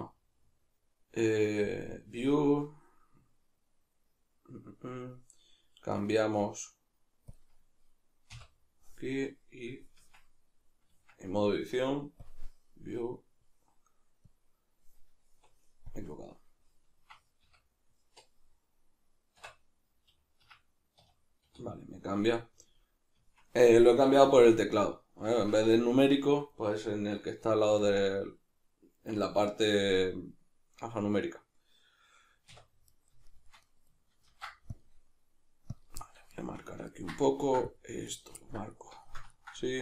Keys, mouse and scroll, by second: 1.7-24.8 drag, 10.0 Tab, 17.1 Escape, 17.5 \, 19.4 Tab, 20.4 Escape, 21.0 \, 22.2 Tab, 24.8-35.8 middle drag, 32.5 \, 34.3 ctrl+r, 35.8 click, 36.0-38.2 middle drag, 37.4 ctrl+r, 38.2 right click, 38.4-39.8 ctrl+middle drag.